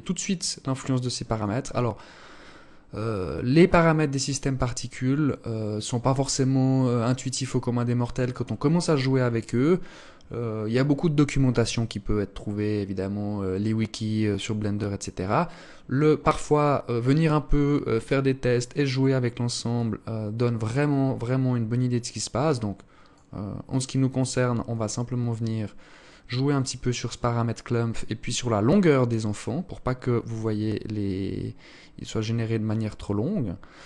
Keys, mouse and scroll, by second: 18.9 click, 23.8 click, 30.2 click.